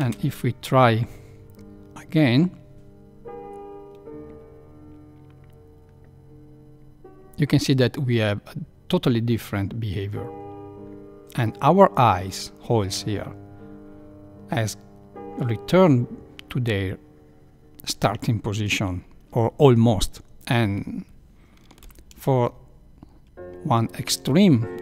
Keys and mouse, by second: 0.2 Left, 0.2 space, 22.2 shift+Left.